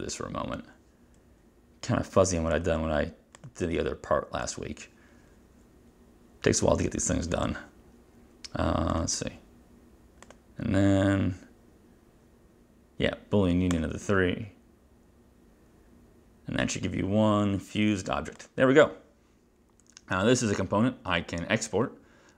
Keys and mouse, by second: 2.6 click, 3.5 click, 4.6 click, 7.5 click, 13.8 click, 18.5 click.